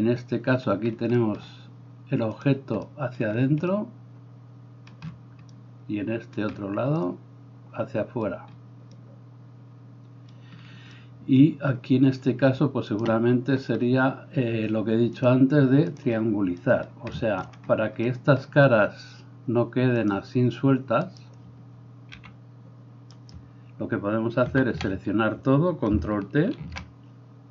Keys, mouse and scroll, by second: 12.9-16.1 alt+middle drag, 12.9-16.1 alt+right drag, 17.4 shift+middle click, 17.4 shift+right click, 17.6 middle click, 17.6 right click, 21.1 right click, 22.2 g, 24.6 a, 24.8 a, 26.7 ctrl+t.